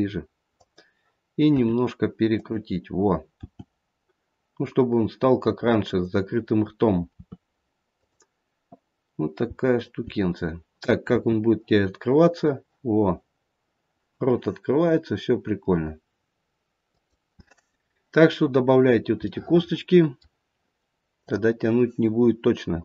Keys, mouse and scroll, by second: 1.6 r, 3.4 g, 7.0 r, 9.4 g, 10.0 g, 11.1 r, 17.7-18.8 scroll down 2, 18.8-19.4 scroll down 1, 19.4 middle click, 19.4-21.2 scroll down 1, 21.2 click.